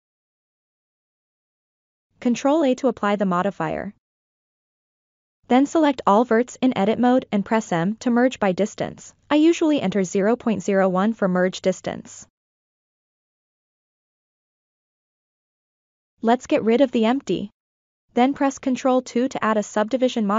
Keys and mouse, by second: 0.0 Tab, 2.2 ctrl+a, 5.0 Tab, 5.7 a, 7.0 m, 9.4 drag, 10.0-11.7 drag, 14.0 Tab, 15.1 click, 16.5 Delete, 17.0 click, 18.3 ctrl+2, 19.0 click, 19.7-20.3 right drag.